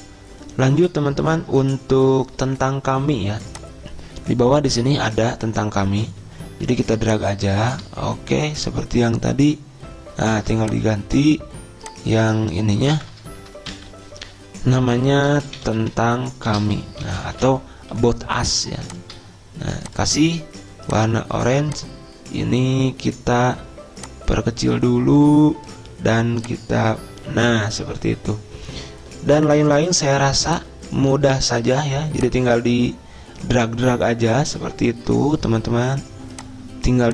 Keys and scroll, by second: 13.3 Delete, 14.1 ctrl+shift+Right, 14.6 ctrl+shift+Down, 15.4-18.3 typing.